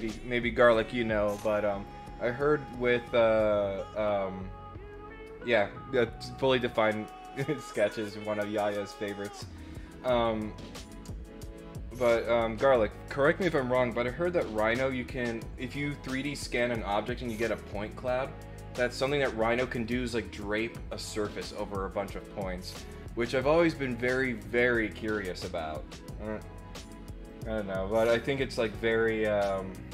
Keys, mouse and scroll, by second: 27.2 click.